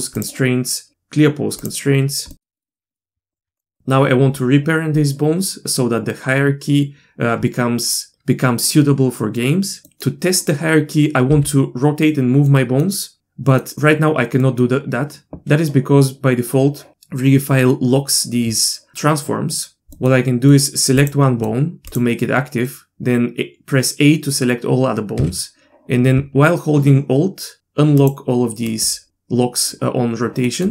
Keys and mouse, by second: 2.4 middle click, 2.5 middle click, 2.7 middle click, 2.9 middle click, 3.1 Tab, 3.5 click, 9.4-9.8 middle drag, 11.3 e, 12.5 middle click, 13.2 middle click, 14.4 middle click, 19.5 middle click, 19.9 middle click, 20.5-21.4 middle drag, 21.9 click, 25.2 a, 28.0 alt+click, 28.7 alt+click, 30.4 middle click.